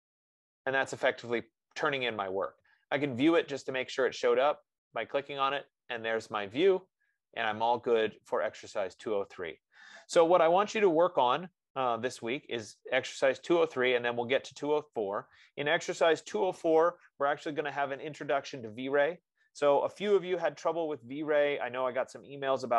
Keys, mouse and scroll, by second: 3.8 click, 5.8-8.9 drag, 11.7 F15.